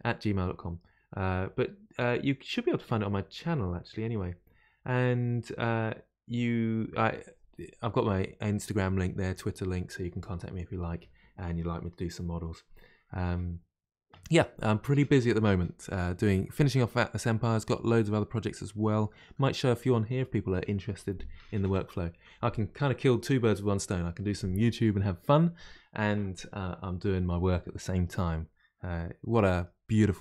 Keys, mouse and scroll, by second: 16.4 middle click, 17.1-17.8 scroll down 2, 17.8-22.7 middle drag, 28.8 scroll down 1, 29.0-29.8 scroll up 1, 29.8-30.2 middle drag.